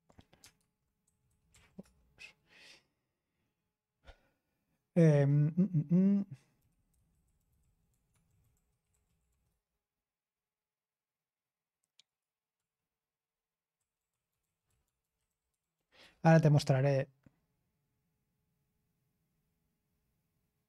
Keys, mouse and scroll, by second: 1.0 typing, 1.4 alt+space, 6.3-9.7 typing, 12.0 click, 12.4-16.4 typing, 19.3-20.6 scroll down 1.